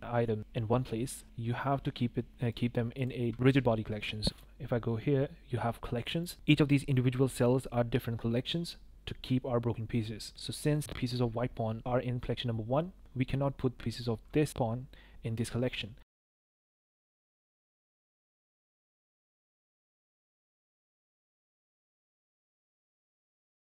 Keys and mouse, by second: 2.5 click, 3.0-4.4 drag, 6.2 click, 10.5 click, 16.1-16.7 drag, 19.1 click, 20.0 shift+click, 20.6 i, 21.2 click, 22.6 i.